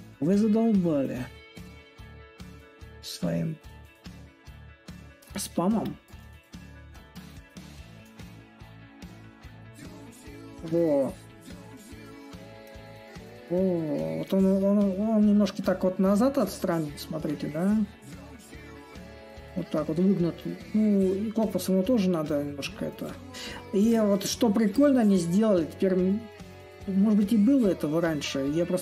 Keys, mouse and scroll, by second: 2.2-10.6 drag, 10.9-12.5 drag, 12.5 ctrl+z, 12.9-14.6 drag, 14.6-16.0 right drag, 16.0-21.0 drag, 21.5-23.7 drag, 23.7-28.8 shift+right drag.